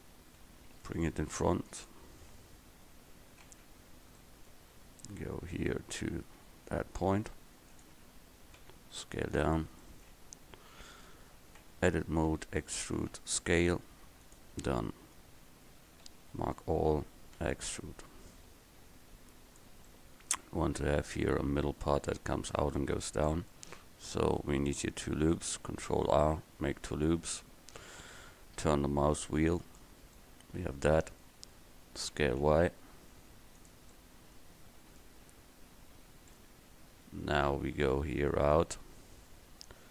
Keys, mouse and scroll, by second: 0.5 KP_1, 2.9 KP_1, 6.6 g, 8.7 s, 11.7 Tab, 12.4 e, 16.1 a, 16.4 a, 17.5 e, 18.4-19.6 drag, 25.7 ctrl+r, 32.2 s, 36.8 KP_1.